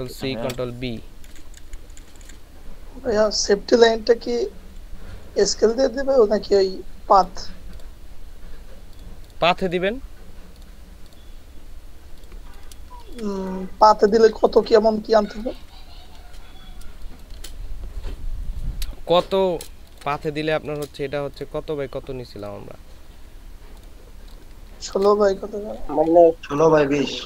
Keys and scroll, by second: 0.1 ctrl+c, 0.4 ctrl+b, 1.3 Down, 1.6 Right, 2.2 Right, 5.5 Down, 5.6 Down, 12.9 ctrl+space, 16.9 space, 19.9 ctrl+space.